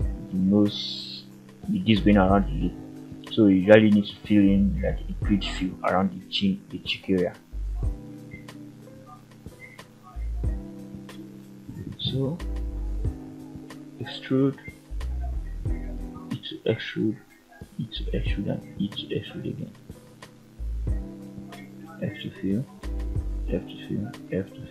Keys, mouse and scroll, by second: 7.8 shift+middle click, 8.2-8.6 scroll up 1, 8.7 click, 9.2-10.0 middle drag, 10.8 g, 11.7 click, 12.2 middle click, 13.4 e, 14.1 click, 14.6 middle click, 15.1 scroll up 1, 15.9 e, 16.7 click, 17.2 middle click, 17.8 e, 18.3 click, 18.6 e, 19.1 click, 19.8 shift+click, 20.4 shift+click, 21.3 shift+click, 21.8 f, 22.2 click, 22.9 shift+click, 23.4 f, 23.8-24.2 scroll down 1, 24.2 f, 24.4 middle click.